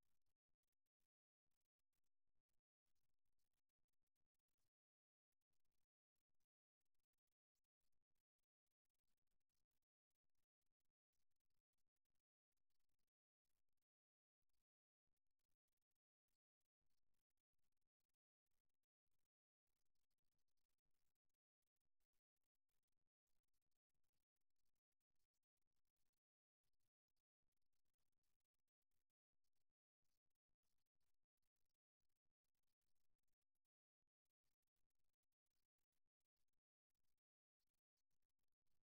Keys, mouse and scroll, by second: 1.0 e, 8.4 s, 10.8-14.4 middle drag, 17.7-19.1 right drag, 19.1-22.6 middle drag, 23.0-24.9 middle drag, 24.9 KP_1, 27.6 e, 30.6-33.0 middle drag, 37.8-38.8 middle drag.